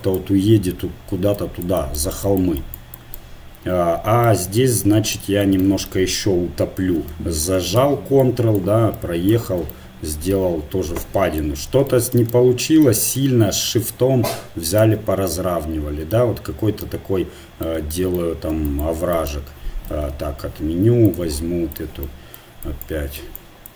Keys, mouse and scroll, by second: 4.3-8.0 middle drag, 4.4 right click, 7.5 right click, 9.7 middle click, 11.6 middle click, 12.2-14.4 middle drag, 13.3-14.9 drag, 15.3-18.5 middle drag, 20.2 ctrl+z, 20.5 ctrl+z, 20.8 ctrl+z, 23.5-23.7 drag.